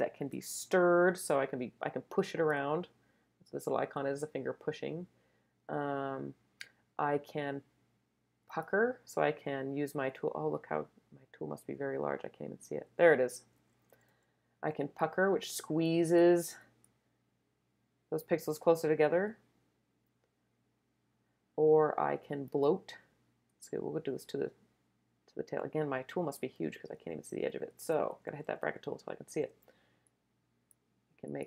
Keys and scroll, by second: 0.2 super+z, 11.7-12.4 typing, 13.5 [, 14.5 [, 26.5-27.3 typing, 28.4 [, 29.4 [.